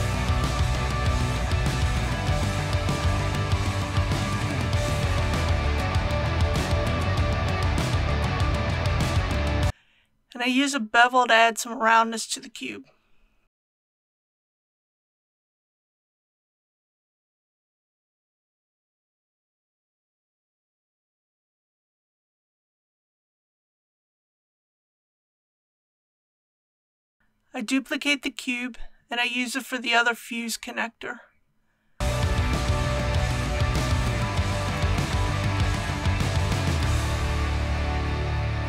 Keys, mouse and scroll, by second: 0.0 click, 0.7 KP_1, 6.2 Tab, 7.1 middle click, 8.2 shift+middle click, 9.4 shift+2, 10.2 click, 11.6 shift+click, 13.4 KP_1, 14.6 ctrl+b, 19.6-21.8 scroll up 1, 22.1 click, 27.9 l, 35.5-36.1 typing, 38.0-38.6 typing.